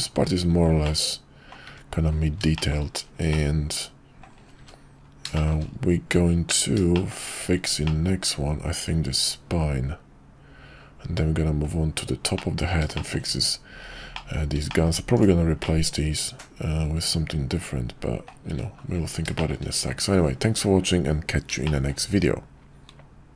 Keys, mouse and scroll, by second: 0.9-1.6 middle drag, 1.7 `, 2.6 middle click, 3.4-4.4 middle drag, 4.6 `, 5.4 middle click, 6.9 middle drag, 7.9-11.7 middle drag, 12.3-12.7 middle drag, 13.0 shift+middle drag, 14.1 middle drag, 14.7 shift+middle drag, 15.1 click, 15.6-18.3 middle drag, 18.5 `, 19.4 middle click, 21.6-22.0 shift+middle drag.